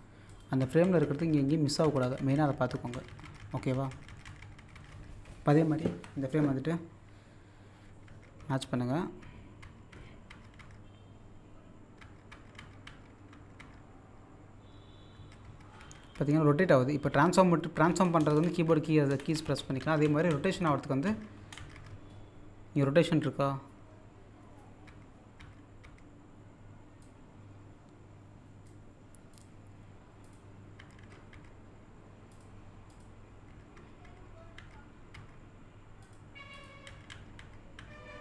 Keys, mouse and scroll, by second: 1.5-1.8 scroll down 1, 4.6 typing, 5.8 typing, 11.4-12.0 scroll up 1, 19.1 Down, 21.4 Down, 27.0-29.3 drag, 32.3 click, 36.0 click.